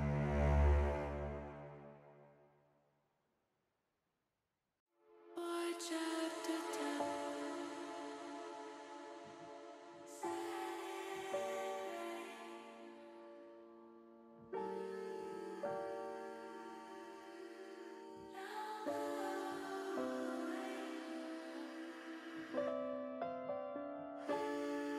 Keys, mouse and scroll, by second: 0.8-8.4 drag, 6.2 s, 10.5-12.0 drag, 14.0 click, 18.8 click, 20.9 click, 21.9 middle click, 22.5 middle click, 23.4 click, 24.0 middle click.